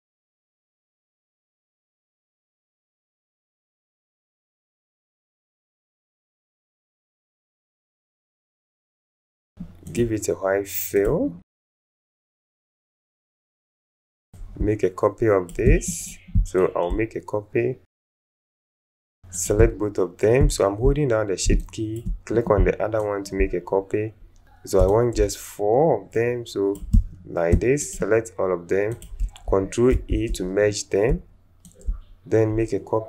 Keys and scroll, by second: 0.3 alt+space, 1.0 alt+space, 21.5 space, 22.5 alt+space, 23.4 alt+shift+space, 24.4 ctrl+alt+shift+z, 29.9 ctrl+alt+shift+e.